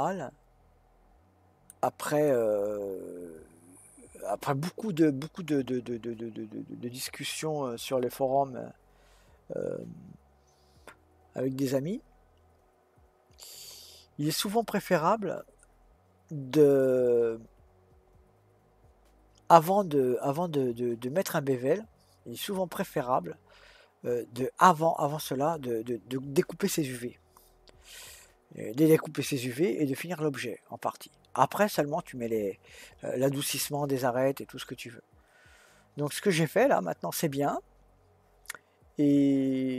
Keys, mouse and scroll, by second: 1.7-2.3 scroll down 1, 2.3-5.3 middle drag.